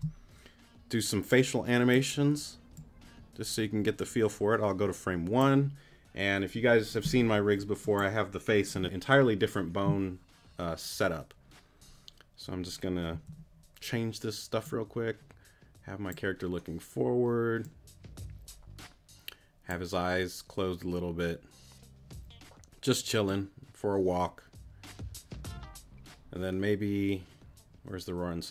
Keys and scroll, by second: 13.1 z.